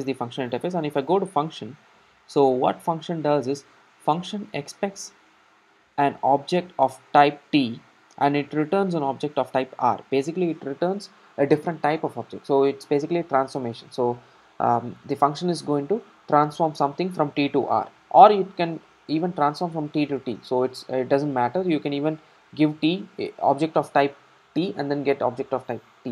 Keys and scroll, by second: 1.0 super+b.